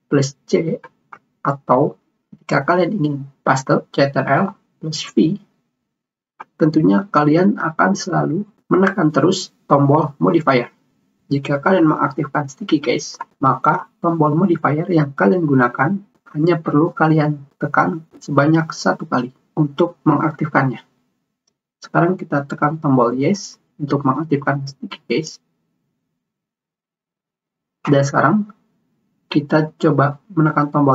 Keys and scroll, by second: 1.1 ctrl+c.